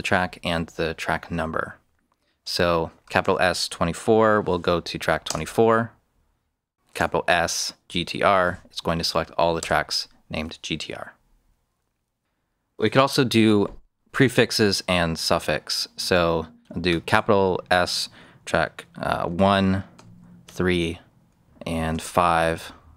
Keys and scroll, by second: 2.9 shift+s, 4.0-4.8 typing, 5.2 Return, 6.8-8.6 typing, 9.5 Return, 17.0 shift+s, 19.2 shift+1, 19.9 ', 20.4 3, 21.6-22.9 typing.